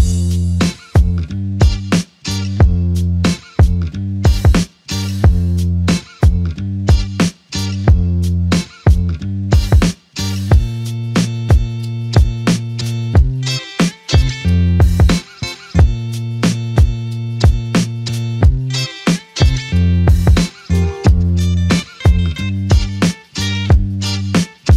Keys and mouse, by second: 2.3 double click, 10.2 double click, 14.4 shift+click, 16.4 shift+double click, 24.2 double click.